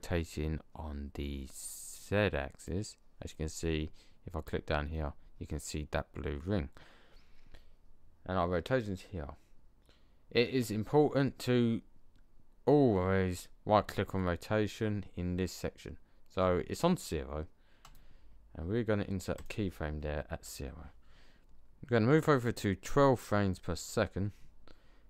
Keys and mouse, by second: 2.5-4.3 drag, 17.8 click, 22.3 click.